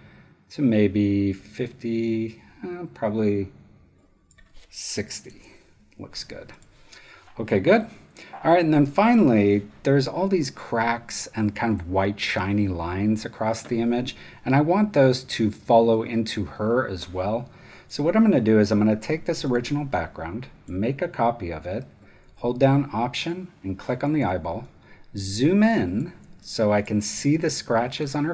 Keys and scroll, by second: 4.9-5.8 typing, 7.8 super+0, 24.2 alt+space, 25.1 space, 26.2 space.